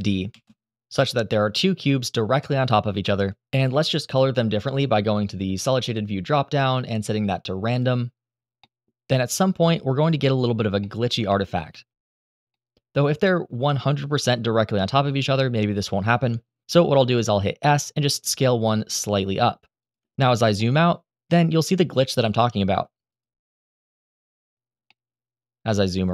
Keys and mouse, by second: 0.0 shift+d, 5.7-7.9 drag, 8.6 middle click, 8.8 middle drag, 11.0 middle drag, 11.5 shift+middle drag, 12.2-13.2 middle drag, 16.6 s, 19.5 shift+middle click, 20.1-20.5 middle drag, 21.5-22.1 middle drag, 22.5-23.1 middle drag, 24.6-26.1 middle drag.